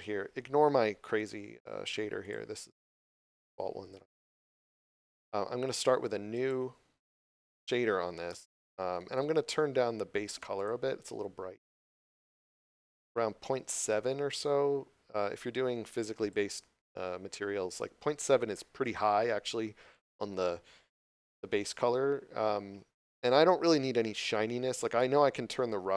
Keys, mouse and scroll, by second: 2.1 click, 3.0 scroll down 1, 3.4 middle click, 4.0 scroll up 1, 6.2 click, 8.2 middle click, 10.5 click, 24.1 click.